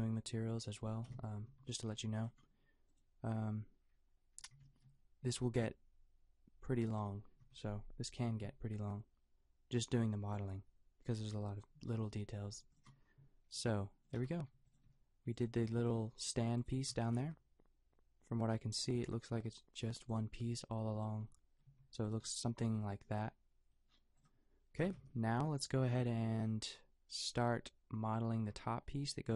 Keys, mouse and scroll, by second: 1.1 KP_5, 1.5 a, 1.9 a, 2.2-5.1 drag, 5.4 s, 7.4 Tab, 8.3 s, 13.5 g, 14.2 Tab, 14.6-16.7 drag, 14.8 g, 15.9 g, 17.3 g, 17.8-20.5 drag, 20.9-23.1 drag, 21.7 a, 22.6 a, 24.8 KP_Decimal, 25.0 KP_5, 28.4 a.